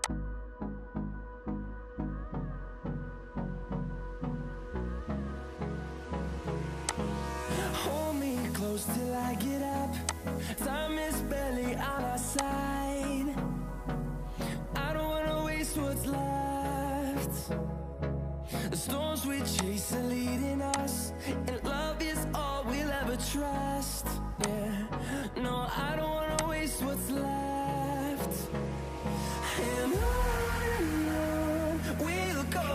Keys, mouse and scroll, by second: 19.5 shift+click, 24.4 shift+click.